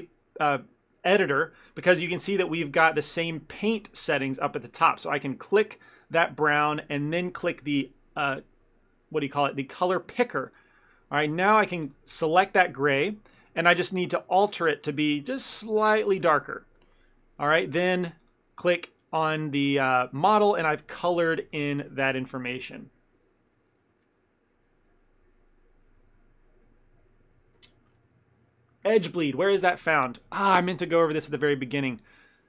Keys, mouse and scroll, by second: 2.2 middle click, 5.5 click, 14.9 click, 16.8 middle click, 18.3 click, 19.4 ctrl+middle click.